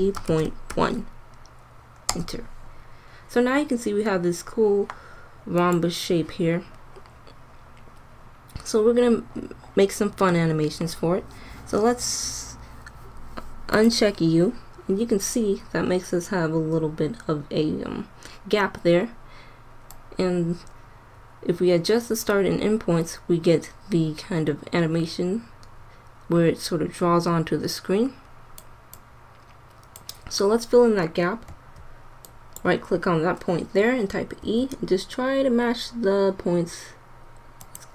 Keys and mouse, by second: 7.2-13.7 middle drag, 13.7-18.7 drag, 19.9-21.8 drag, 28.9-33.7 drag, 31.4 Tab, 34.4 e.